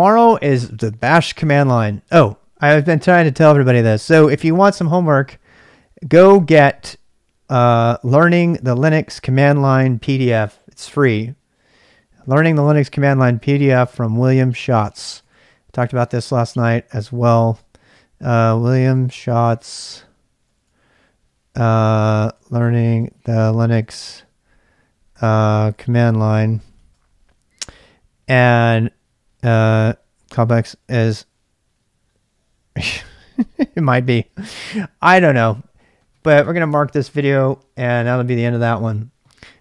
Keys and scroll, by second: 2.1-2.5 k, 6.0 j, 6.3 j, 6.3 j, 6.5 j, 14.9-27.9 typing, 15.8 ctrl+[, 15.8 ctrl+j, 30.8 Return, 30.8 typing.